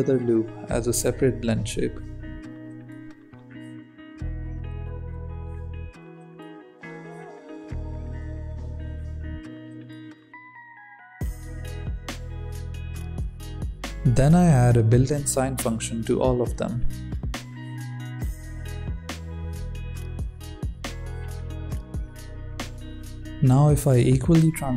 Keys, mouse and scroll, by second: 0.5 click, 0.6 Tab, 0.8 c, 1.1 g, 1.5 Tab, 2.0 click, 3.2 Tab, 3.3 Tab, 3.6 click, 3.8 Tab, 3.9 alt+a, 4.2 g, 5.2 Tab, 5.5-6.5 drag, 7.0 click, 7.2 Tab, 7.3 alt+a, 7.6 g, 8.6 click, 9.1 Tab, 9.2 middle drag, 9.4-10.4 drag, 10.7 scroll down 2, 11.0 middle click, 11.8 click, 12.0-12.7 scroll up 5, 12.7-13.2 shift+middle drag, 13.2 scroll down 1, 13.3-16.8 drag, 17.3 click, 19.3-21.1 drag, 21.1 space, 21.4 space, 21.4 click, 22.6-24.7 drag.